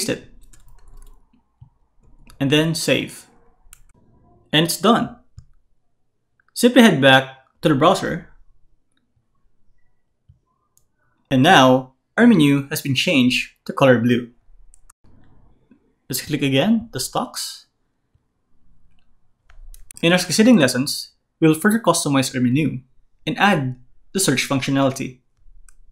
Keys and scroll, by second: 0.7 shift+super+v, 1.6 super+v, 2.0 super+s.